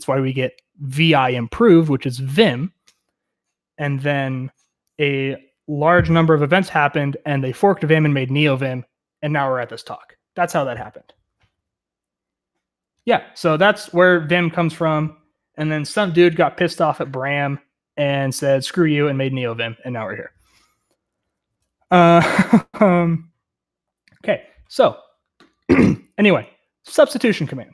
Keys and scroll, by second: 21.8-22.9 k, 23.7 k, 24.5 k, 24.8 k.